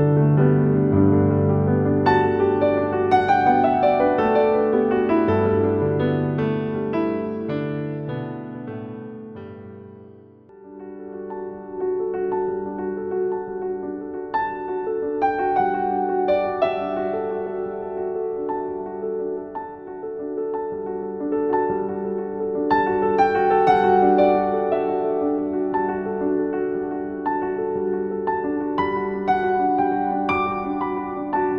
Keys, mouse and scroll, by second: 0.0-0.6 typing, 0.0 click, 0.4 click, 0.7-7.0 drag, 7.0-13.3 typing, 7.3 click, 8.0 click, 8.4 click, 9.9 click, 11.9 click, 13.0 click, 14.0-17.2 drag, 17.2 shift+Down, 18.1 z, 18.4 click, 18.6 z, 18.9 space, 19.2 click, 20.2 scroll up 1, 20.9-21.8 typing, 21.1 click, 24.4-26.9 drag, 26.9 ctrl+c, 27.2 scroll down 1, 28.0 click, 29.0 ctrl+v, 30.4 click.